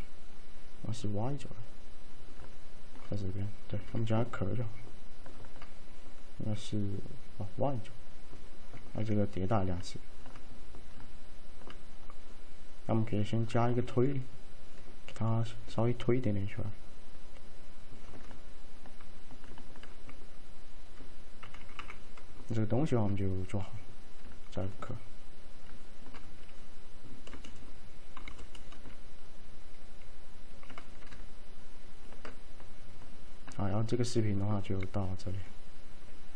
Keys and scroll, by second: 21.5 F3, 21.7 typing, 28.3 p.